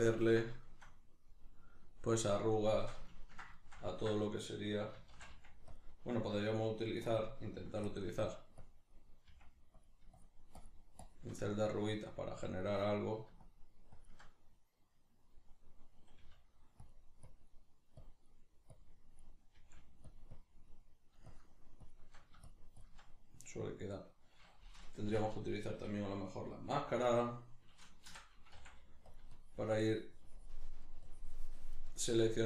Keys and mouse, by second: 5.1 shift+c, 5.8 click, 7.6 click, 7.6 f, 8.0 middle click, 8.7-9.9 drag, 9.3 f, 10.2-11.4 shift+drag, 11.4-12.5 middle drag, 12.5-14.8 drag, 14.8-17.0 middle drag, 16.2 f, 17.0 click, 19.6 click, 19.6 f, 20.7-23.4 drag, 23.4-29.2 middle drag, 29.2 click, 30.6 click, 30.6 middle click, 31.1 click, 31.9-32.4 middle drag.